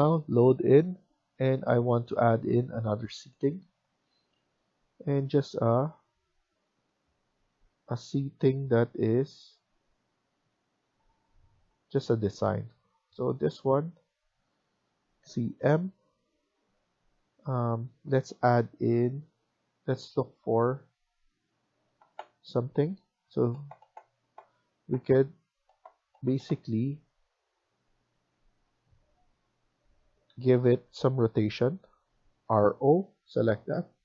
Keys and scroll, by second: 17.6 typing, 30.2 Escape, 30.4 Escape, 31.3 Escape, 32.3-32.8 typing.